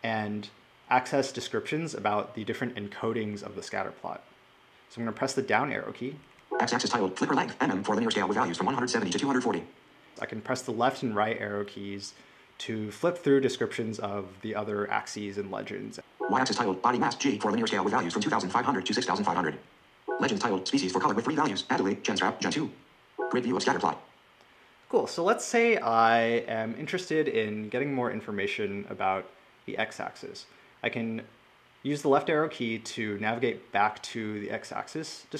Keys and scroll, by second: 6.2 Down.